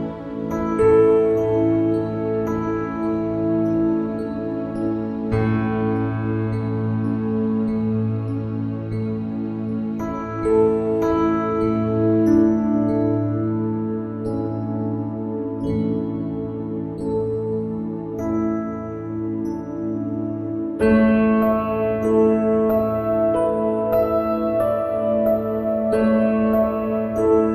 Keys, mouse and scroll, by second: 1.5 middle click, 2.0 KP_1, 2.8-4.4 middle drag, 4.6 shift+z, 5.3 click, 5.6 ctrl+b, 6.7 shift+z, 7.3 shift+z, 7.6 ctrl+r, 8.9 shift+z, 9.5 shift+z, 10.2 click, 10.8 Tab, 10.8 middle click, 11.4 KP_1, 12.0 shift+d, 13.5 shift+d, 15.6 middle click, 16.3 shift+z, 17.5 middle click, 19.0 shift+z, 19.0 KP_1, 20.2 middle click, 22.0 right click, 22.1 click, 23.0 click, 23.3 click.